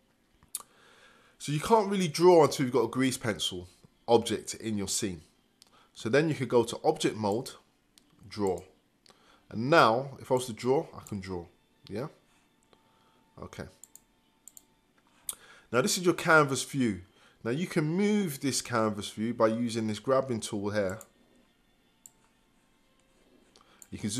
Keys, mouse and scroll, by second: 10.3-12.6 drag, 13.5-21.1 drag, 22.1-24.1 drag.